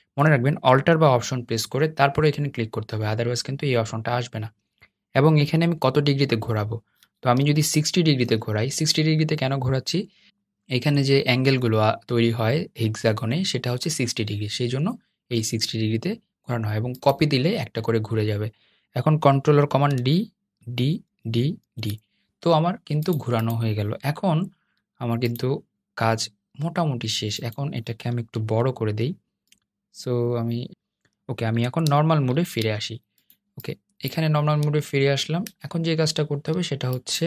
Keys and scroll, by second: 19.7 super+d, 20.3 super+d, 20.8 super+d, 21.3 super+d, 32.0 super+y.